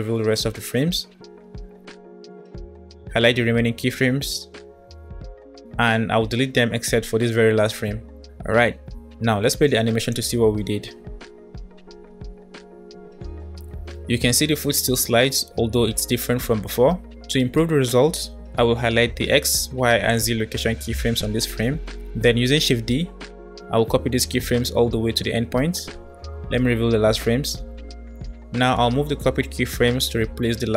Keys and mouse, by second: 2.9 b, 6.1 Delete, 10.2 space, 15.9 space, 17.7 space, 19.5-21.0 drag, 22.8 shift+d, 26.0-27.2 middle drag, 28.3 g.